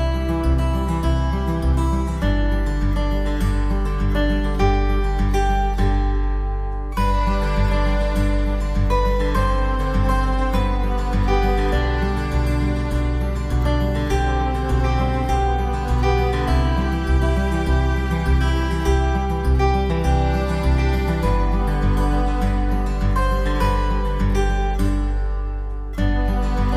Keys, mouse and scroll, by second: 0.5-0.9 scroll up 4, 1.1 shift+middle click, 1.7 shift+middle click, 2.0-2.4 scroll up 2, 2.6 shift+middle click, 3.4 right click, 4.4 click, 5.7 click, 7.5 click, 8.7 click, 10.2 click, 11.8 click, 17.8 right click, 20.2 click, 20.9 scroll down 2, 21.2 middle click, 22.4 middle click, 25.7 click, 26.5 click.